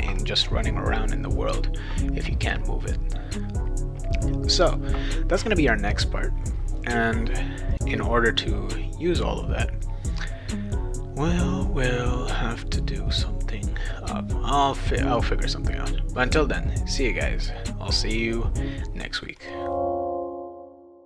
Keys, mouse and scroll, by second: 7.7 click, 15.2 click.